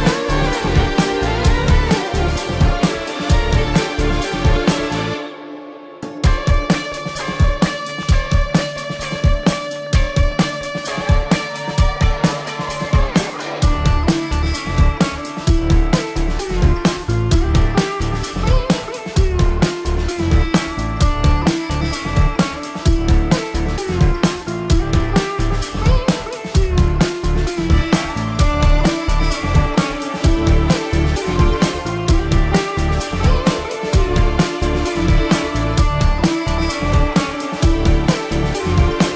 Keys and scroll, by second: 0.8 ctrl+-, 1.5 ctrl+alt+z, 2.0 ctrl+alt+z, 5.2 ctrl+alt+z, 6.8 ctrl+alt+z, 7.6 ctrl+-, 7.8 ctrl+alt+z, 11.2 ctrl+alt+z, 12.1 ctrl+alt+z, 14.4 ctrl+-, 16.3 ctrl+-, 19.1 ctrl+alt+z, 19.4 ctrl+alt+z, 19.9 ctrl+-, 21.8 ctrl+alt+z, 22.7 ctrl+alt+z, 23.1 ctrl+alt+z, 24.0 ctrl+alt+z, 24.5 ctrl+alt+z, 32.3 ctrl+alt+z, 35.5 space.